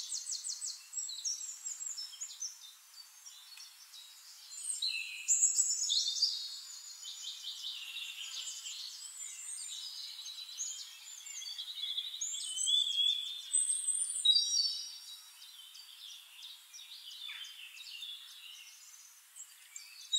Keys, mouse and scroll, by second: 0.3 ctrl+d, 0.6 ctrl+click, 1.4 ctrl+click, 2.4 click, 2.7 click, 3.3 click, 3.9 click, 4.3 shift+click, 4.6 shift+click, 5.3 ctrl+d, 5.6 click, 6.5 ctrl+click, 7.4 ctrl+click, 8.6 click, 8.9 click, 9.4 click, 9.9 click, 10.3 shift+-, 11.1 click, 11.6 drag, 12.4 click, 13.1 middle click, 13.7-17.6 drag, 18.1 click, 18.7 click, 19.0 click, 19.3 click, 19.9 click.